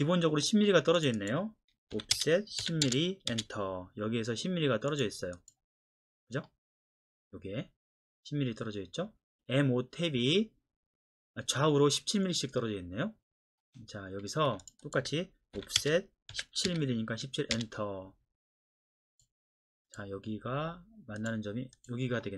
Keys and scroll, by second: 1.9 o, 2.1 Return, 2.6 KP_1, 2.8 KP_0, 3.3 Return, 14.5 Escape, 15.6-16.7 typing, 15.8 Return, 17.5 Return.